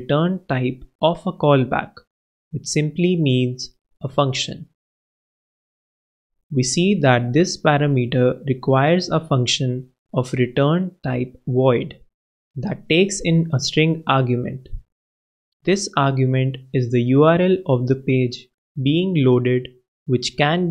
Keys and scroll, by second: 2.1 super+[, 16.9 super+Right, 17.5 shift+super+Left, 17.8 shift+0, 18.1 shift+Left, 19.8 shift+BackSpace, 19.9 shift+[.